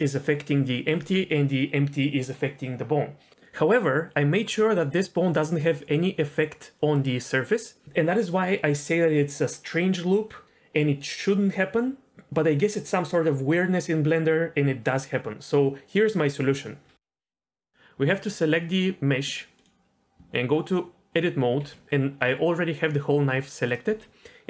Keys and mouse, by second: 19.1 Tab, 20.2 Tab, 21.6 g.